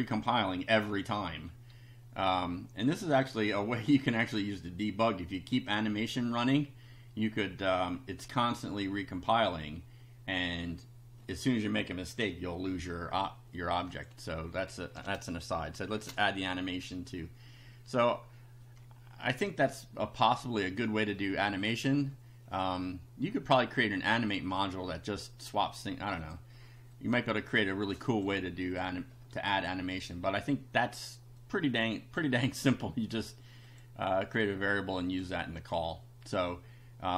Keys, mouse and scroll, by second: 3.3 click, 4.1 middle click, 13.9 click, 15.9 shift+a, 21.2 click, 25.5 click, 26.2 click, 26.9 click, 28.0 click, 28.7 click, 31.5 click, 32.6 click, 33.7 click, 35.1 click.